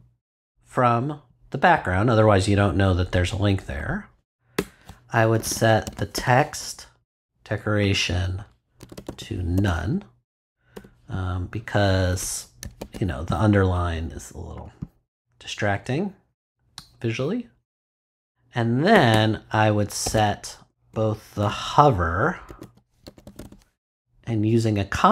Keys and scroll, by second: 4.5 Return, 5.1-7.1 typing, 8.8 n, 10.7 ;, 12.1 BackSpace, 12.6 super+BackSpace, 12.8 super+s, 18.9 Return, 20.0-23.5 typing.